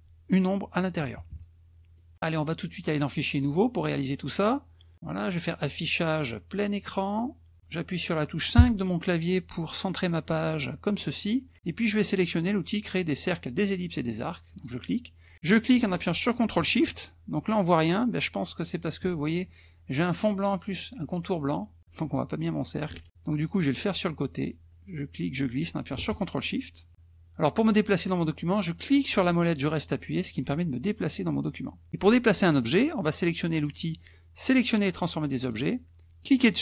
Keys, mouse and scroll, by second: 1.0 KP_Subtract, 1.9 middle click, 2.9 click, 3.5 click, 5.7 click, 8.5 KP_5, 14.5 click, 15.3-19.0 drag, 23.1 ctrl+z, 23.1 ctrl+click, 24.7-26.9 drag, 28.9-31.9 drag, 35.3 click, 36.2-36.6 drag.